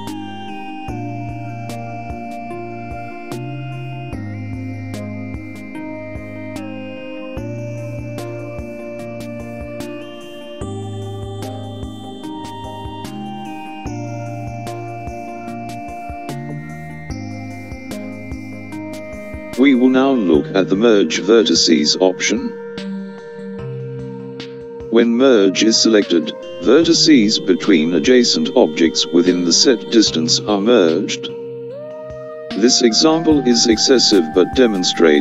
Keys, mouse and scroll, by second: 8.5 click, 17.8 click, 26.7 click, 28.6 click.